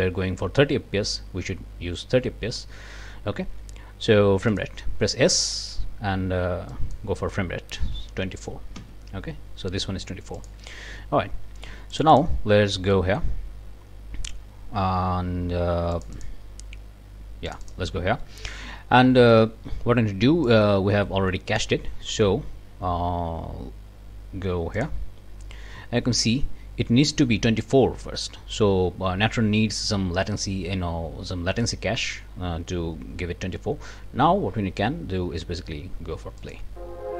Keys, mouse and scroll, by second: 4.5 click, 5.4 click, 5.7 s, 6.7 click, 7.7-8.7 typing, 8.7 Return, 9.8 click, 10.4 click, 11.9 click, 12.9 scroll up 1, 13.0 click, 15.9 click, 17.5 click, 20.4-21.8 drag, 24.8 click, 36.4 click.